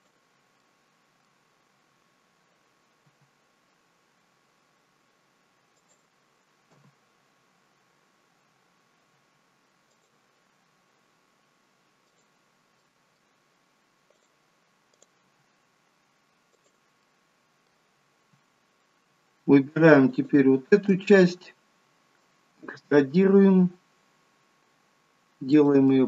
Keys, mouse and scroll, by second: 0.5 middle click, 3.0 g, 6.6 KP_1, 9.1 g, 12.0 click, 12.7 middle click, 14.1 click, 14.9 click, 15.1 g, 17.0 middle click, 20.0 alt+shift+click, 22.7 e, 25.8 middle click.